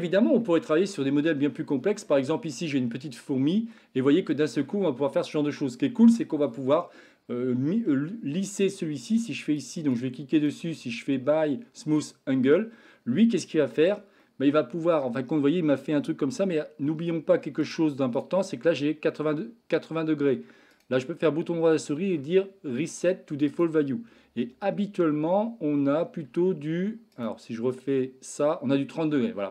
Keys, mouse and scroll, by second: 0.4-0.9 shift+middle drag, 2.0-2.5 shift+middle drag, 3.2-3.8 middle drag, 4.3-4.6 shift+middle drag, 5.0-6.0 middle drag, 8.7-9.7 right drag, 10.4-12.2 right drag, 12.4-13.5 middle drag, 13.7 Tab, 14.2 middle click, 15.3-16.6 middle drag, 17.7-18.2 right drag, 20.8-23.5 right drag, 25.0 Tab, 25.9 Tab, 26.3 Tab, 26.6 Tab.